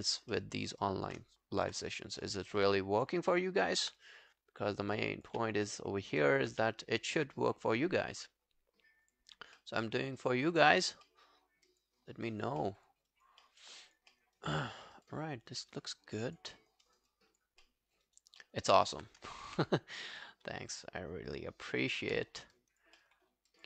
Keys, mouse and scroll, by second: 0.3 alt+middle click, 0.9 alt+click, 1.7 b, 2.2 alt+middle click, 2.5 alt+right click, 2.7 alt+click, 3.3 alt+middle click, 5.5 q, 5.7 alt+middle click, 6.0 alt+scroll down 1, 6.2 alt+click, 6.5 q, 6.7 right click, 9.3 scroll down 2, 9.6 alt+middle click, 9.9 alt+scroll up 1, 10.5 alt+scroll down 3, 11.1 alt+middle click, 11.7 alt+scroll down 1, 11.7 alt+click, 12.0 alt+scroll up 4, 12.3 alt+click, 12.6 alt+middle click, 13.1 alt+click, 13.4 alt+middle click, 13.6 alt+right click, 13.9 alt+click, 14.2 alt+middle click, 14.4 alt+right click, 14.7 alt+middle click, 14.9 alt+right click, 15.1 alt+click, 16.6 alt+middle click, 16.9 alt+right click, 17.1 alt+click, 17.7 alt+middle click, 18.1 alt+right click, 18.4 alt+middle click, 18.7 alt+right click, 19.5 w, 22.1 q, 22.3 scroll down 1, 22.6 alt+click, 23.0 alt+middle click, 23.3 alt+scroll down 2, 23.5 alt+click.